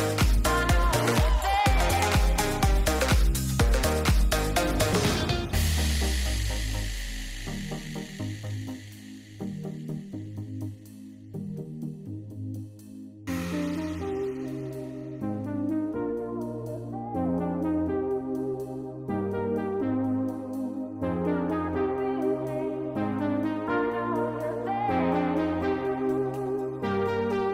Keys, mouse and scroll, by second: 0.2 shift+a, 3.3 middle click, 4.2 click, 4.8 click, 5.2 middle click, 5.9 click, 6.1 middle click, 7.0 middle click, 7.5 click, 7.8 click, 8.5-9.3 drag, 9.7 middle click, 10.5 middle click, 10.8 middle click, 11.2 middle click, 11.9 ctrl+shift+click, 13.3 ctrl+t, 13.7 middle click, 14.2 middle click, 14.4 click, 14.7 click, 15.6 middle click, 16.1 middle click, 16.9-17.3 drag, 18.1 middle click, 18.7 click, 19.5-20.8 drag, 21.5 Return.